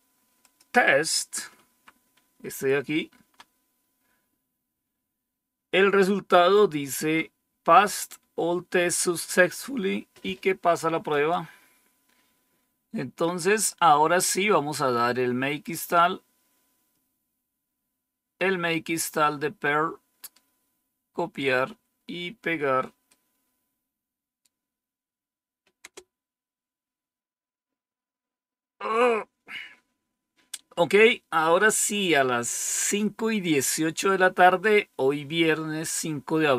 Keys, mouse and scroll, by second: 0.3 click, 1.5 Up, 3.1 Down, 6.5-8.0 drag, 11.0 click, 12.6-13.5 scroll down 2, 15.8-19.0 drag, 19.2 click, 20.3-21.9 right drag, 23.0-25.0 right drag, 25.7 Return.